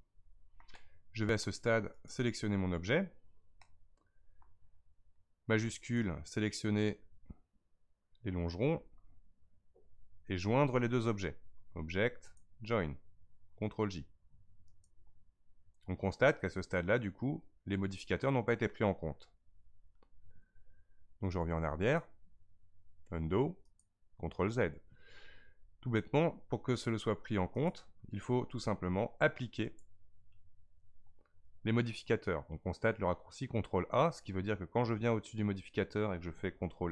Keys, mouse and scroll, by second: 2.0 click, 3.6-5.8 middle drag, 5.8 shift+click, 12.2-15.4 drag, 21.8-24.9 drag, 26.8 click, 27.6 click, 29.6-32.8 drag.